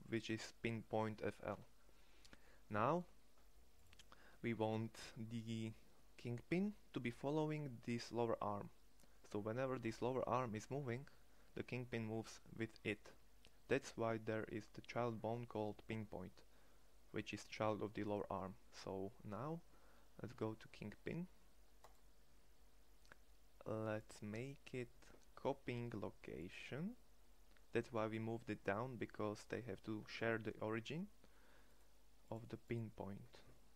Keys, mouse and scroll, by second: 3.9 middle click, 4.4-26.1 drag.